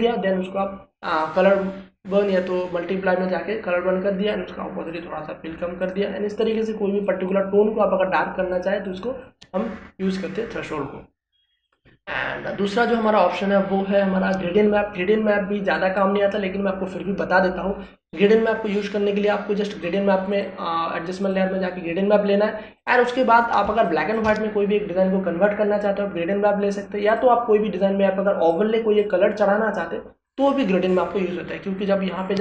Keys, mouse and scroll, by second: 12.6 click, 16.7 click, 20.8 click, 24.6 space, 24.8 ctrl+click.